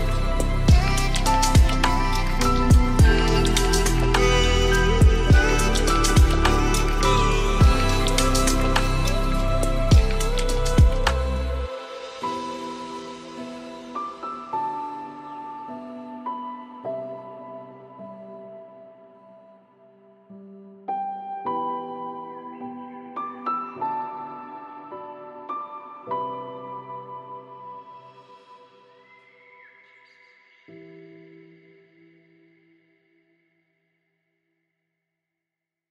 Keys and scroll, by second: 16.4 ctrl+space.